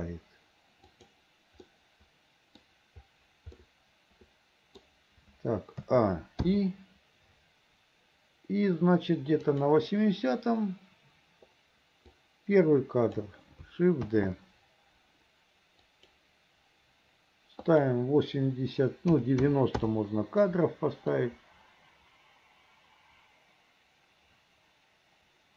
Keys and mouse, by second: 1.8 middle click, 3.7-5.0 middle drag, 6.0 a, 6.6 i, 9.6 click, 12.4 click, 14.2 shift+d, 17.9-20.0 drag, 21.3-25.5 drag.